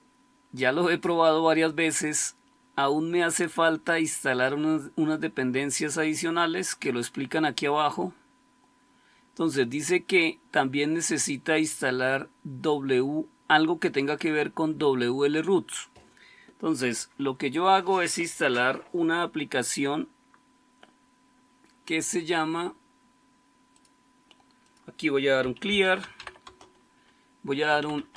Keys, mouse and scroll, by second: 0.5-1.9 scroll up 1, 1.9-5.3 scroll down 1, 5.3-14.1 scroll down 1, 14.1-15.3 scroll down 1, 15.3-23.8 scroll down 1, 23.8-25.3 scroll down 1, 25.1-28.1 typing.